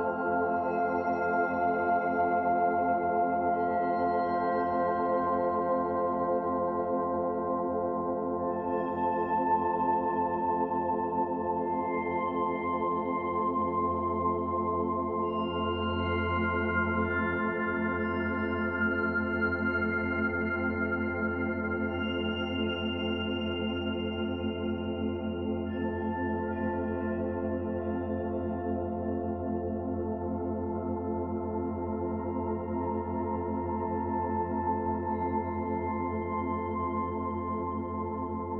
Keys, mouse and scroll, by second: 1.1 click, 1.5 shift+click, 1.9 click, 3.4 Delete, 4.1 middle click, 8.2 click, 8.7 shift+click, 10.1 Delete, 11.6 shift+click, 12.5 Delete, 13.7 click, 14.1 shift+click, 15.0 Delete, 16.9 Tab, 17.3 scroll down 1, 17.6 middle click, 18.5-18.9 scroll up 1, 19.0 shift+middle click, 19.4-19.8 scroll up 2, 20.0-21.1 scroll down 4, 20.5 middle click, 21.1 middle click, 25.6 shift+d, 26.6 click, 28.6 middle click, 29.5 click, 30.8 click, 31.4 middle click, 33.0 s, 34.8 r, 36.1 middle click, 37.2 click.